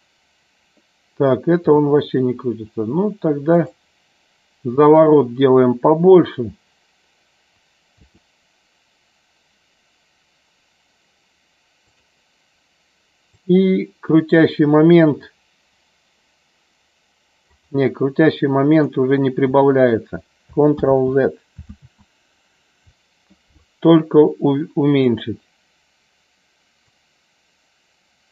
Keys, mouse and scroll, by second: 13.2-14.4 drag, 17.5-18.9 drag, 25.0 click, 26.9-28.3 drag.